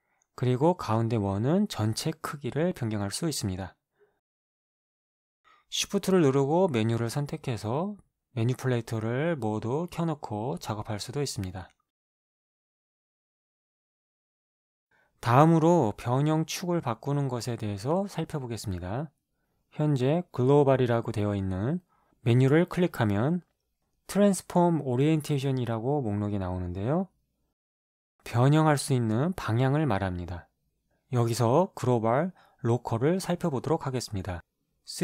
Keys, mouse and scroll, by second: 0.3 ctrl+z, 2.3 click, 7.7 shift+click, 8.3 shift+click, 9.7 click, 10.9-12.9 drag, 13.7-14.4 drag, 24.5 click.